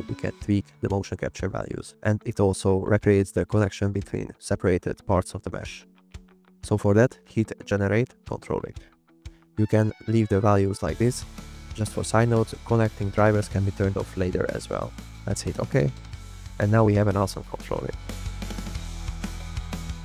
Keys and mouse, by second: 6.3 click, 7.9 click, 9.2-15.9 drag, 17.7 click, 18.3-18.8 drag, 19.2 click, 19.4 g.